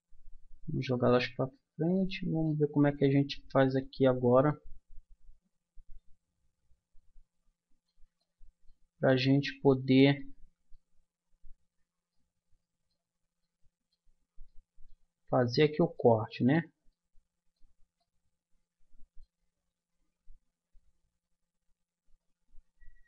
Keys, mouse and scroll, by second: 1.8-3.5 drag, 3.5-6.4 middle drag, 7.0 middle click, 8.2-9.3 middle drag, 9.5 middle click, 12.4 middle click, 15.4-18.4 middle drag, 22.8 a.